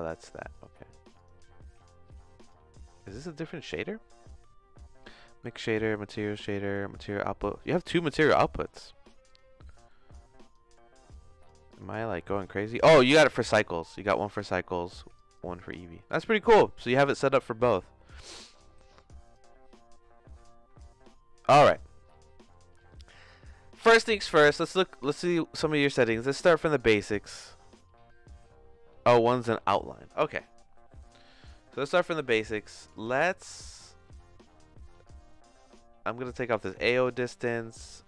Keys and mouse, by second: 0.0 click, 0.5 click, 1.2 click, 2.4 click, 3.7 middle click, 7.6 click, 8.8 middle click, 9.2 click, 9.7 middle click, 10.3 click, 11.1 click, 12.1-13.3 drag, 14.1 click, 14.8 click, 15.3 click, 15.9 middle click, 16.5 middle click, 20.9 middle click, 24.4 middle click, 25.5 middle click, 32.3 click, 35.0-36.4 drag.